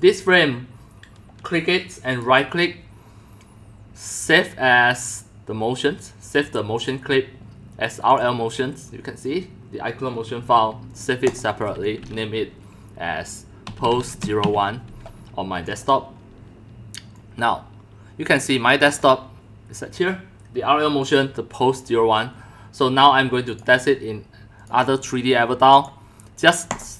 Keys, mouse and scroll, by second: 0.0 click, 2.2-6.1 right drag, 6.2 right click, 6.9-8.2 drag, 8.3 click, 11.3 click, 13.4-14.9 typing, 15.8 click, 17.2 click, 18.2 typing, 18.5 click, 18.8 click, 20.9 click, 21.1 click, 23.5 click, 26.7 click.